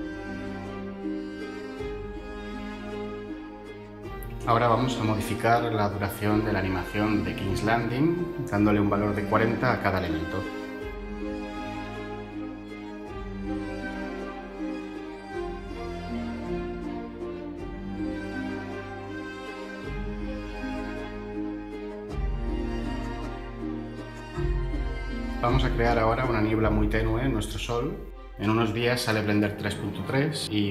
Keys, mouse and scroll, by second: 6.6 Tab, 8.5 typing, 9.0 Return, 9.4 Tab, 10.1 Tab, 11.6 typing, 11.8 Return, 13.0 typing, 13.3 Return, 15.0 typing, 15.2 Return, 16.9 Tab.